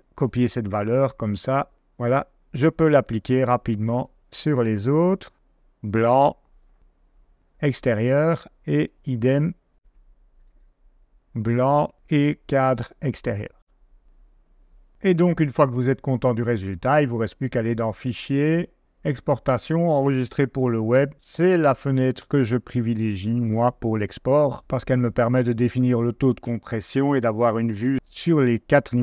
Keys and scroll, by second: 0.2 super+c, 5.2 super+a, 5.3 super+v, 10.3 super+a, 10.5 super+v.